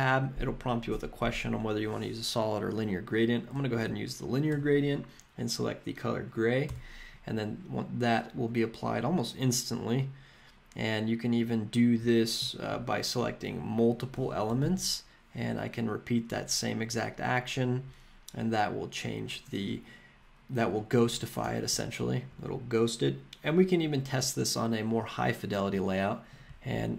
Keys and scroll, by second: 3.7 Down, 4.5 Return, 6.7 Return, 14.6 super+/, 21.4 BackSpace.